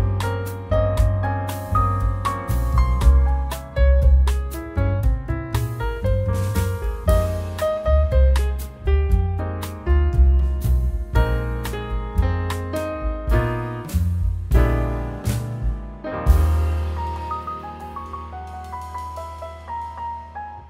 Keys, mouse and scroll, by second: 0.9 shift+click, 2.8 shift+click, 4.6 shift+s, 6.7 shift+d, 11.7-12.4 scroll down 5, 12.4-13.2 scroll up 1, 13.2 click, 19.8-20.2 scroll down 1, 20.2 middle click.